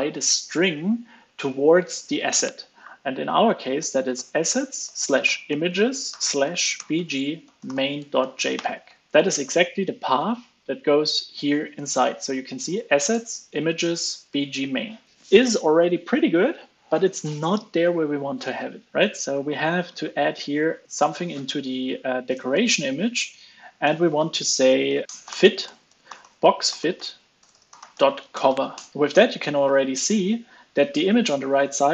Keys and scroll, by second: 8.9 super+s, 19.8 ctrl+space, 25.0 ctrl+space, 28.9 super+s, 28.9 alt+super+l, 30.0 alt+super+l, 30.2 super+s.